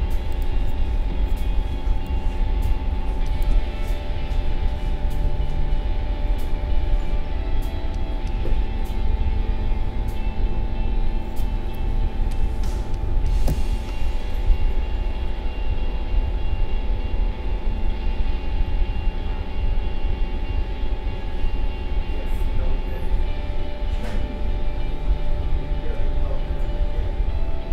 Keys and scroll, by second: 1.7 space.